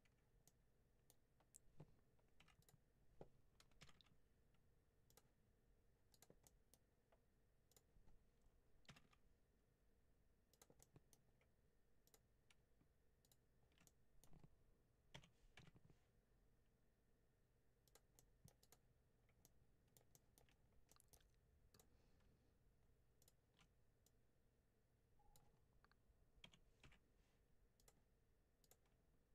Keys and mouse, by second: 0.3 middle click, 2.3 1, 2.5 click, 3.7 g, 3.8 g, 5.0 click, 6.3 middle click, 8.7 g, 8.9 g, 10.4 click, 10.7 middle click, 13.8 middle click, 15.0 s, 15.4 y, 17.7 click, 18.1 middle click, 19.3 middle click, 20.1 shift+middle click, 20.8 middle click, 23.9-25.2 drag, 26.3 s, 26.7 y, 27.6 click.